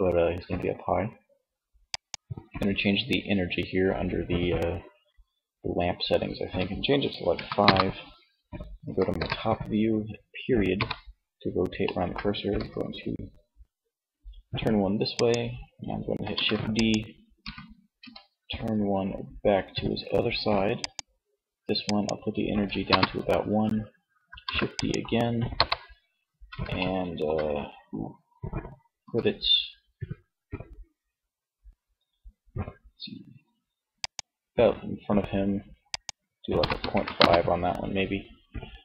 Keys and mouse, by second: 1.1-2.7 drag, 8.2 KP_7, 9.8 ., 11.7 r, 14.5-17.6 drag, 15.5 shift+d, 16.4 r, 20.1-22.6 drag, 23.6 shift+d, 24.0 click, 24.6 KP_3, 28.0 r, 33.1-36.7 drag, 38.0 click.